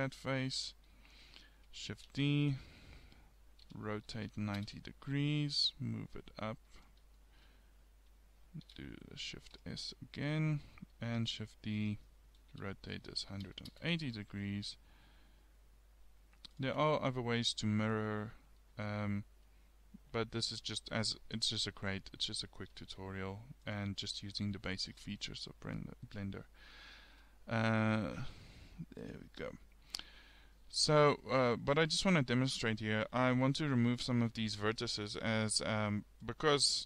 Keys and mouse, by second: 0.7 KP_3, 2.2 shift+d, 5.6 g, 7.2 click, 8.7 shift+s, 10.1 middle click, 11.2 shift+d, 12.6 r, 14.3 g, 17.2 click, 21.9 KP_3, 22.8 shift+s, 28.0-30.9 middle drag, 32.0-34.0 middle drag, 35.1-36.8 middle drag.